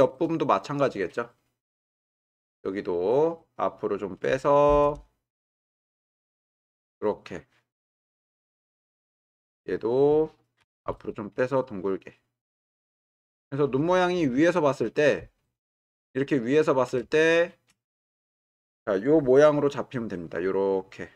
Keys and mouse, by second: 0.4-4.1 middle drag, 5.4 g, 5.6 y, 10.6 g, 10.8 y, 12.8-14.3 middle drag, 14.8 middle click, 16.1-16.8 shift+middle drag, 17.4 shift+middle click, 18.9 click.